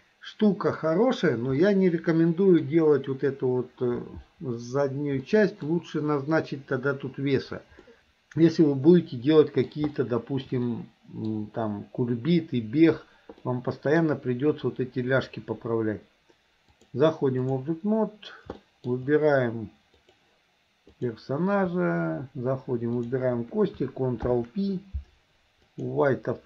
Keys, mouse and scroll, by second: 0.0 middle click, 1.7-2.7 middle drag, 5.3 middle click, 7.9 middle click, 9.1 middle click, 10.0 shift+middle click, 10.7 middle click, 13.5 middle click, 16.7 click, 18.6 shift+middle click, 20.1 click, 20.9 click, 23.1 shift+click, 24.2 ctrl+p.